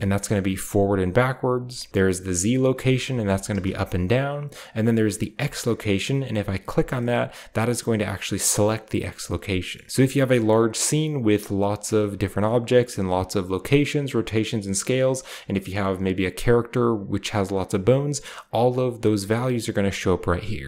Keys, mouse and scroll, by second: 0.0-1.4 scroll up 1, 0.0 typing, 1.9-3.6 scroll up 1, 2.4-6.8 shift+drag, 3.1 typing, 7.0-8.7 middle drag, 7.0-7.6 scroll down 1, 7.6-8.7 scroll down 1, 8.7 scroll down 1, 9.6 middle click.